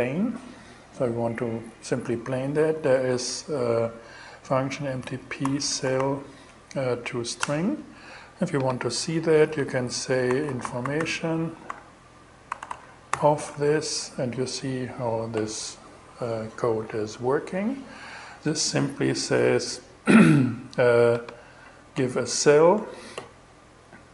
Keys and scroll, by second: 2.3 shift+t, 2.6 shift+p, 4.7-5.8 typing, 6.9 Return, 9.5-12.6 typing, 13.8 shift+Return, 22.2 BackSpace.